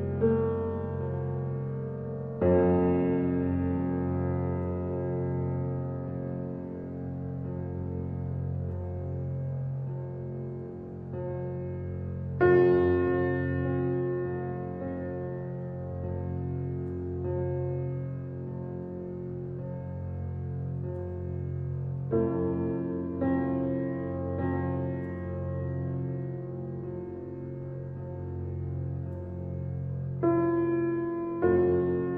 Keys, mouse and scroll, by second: 1.1 x, 2.5-3.7 shift+middle drag, 3.7-5.0 drag, 5.5 alt+click, 6.1-8.0 middle drag, 8.0-8.3 scroll up 1, 8.3 shift+middle click, 9.3-10.7 scroll up 1, 10.7 e, 14.2-16.9 shift+middle drag, 16.9 alt+click, 18.7 ctrl+b, 23.9-25.8 shift+drag, 27.2 s, 31.9-32.1 drag.